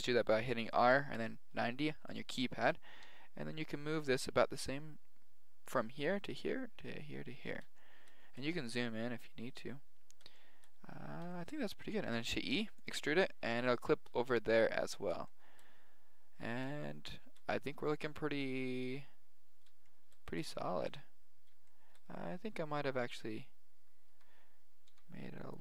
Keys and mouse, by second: 3.0 g, 7.8 middle click, 9.6-12.0 middle drag, 12.0 e, 13.9 middle click, 17.0-18.7 middle drag, 19.9-22.2 middle drag, 22.7-24.7 middle drag, 23.0 a, 24.1 a, 24.9 g.